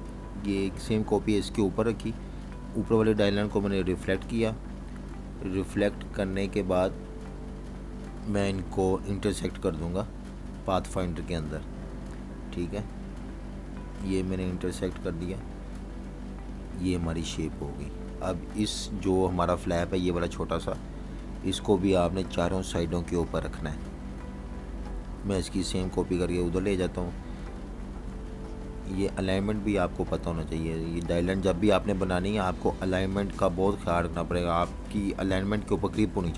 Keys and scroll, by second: 18.5 super+y, 19.3 super+y, 20.2 super+-, 20.3 super+-, 20.8 v, 21.3 super+-, 21.9 v, 22.0 space, 22.5 space, 22.9 super+-, 23.1 super+-, 23.5 v, 23.6 space, 28.6 typing.